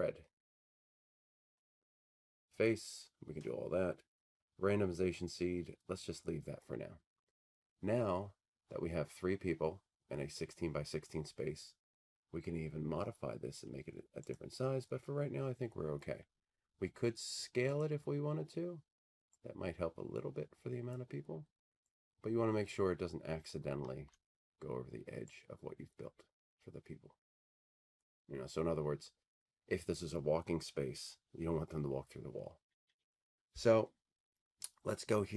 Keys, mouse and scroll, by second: 1.5 click, 5.8-6.1 scroll, 13.6-14.5 scroll, 14.5 click, 14.8-17.2 middle drag, 14.8-16.5 scroll, 18.0-20.0 drag, 20.9-23.2 drag, 23.5-25.9 drag, 24.1 w, 28.0-30.3 drag.